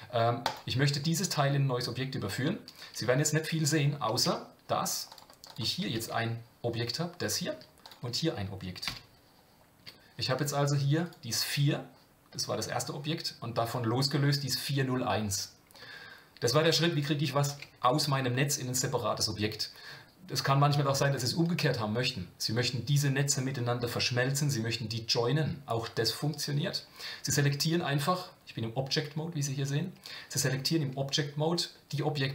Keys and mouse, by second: 4.2 Tab, 5.5 click, 5.9 g, 7.8 click, 8.9 g.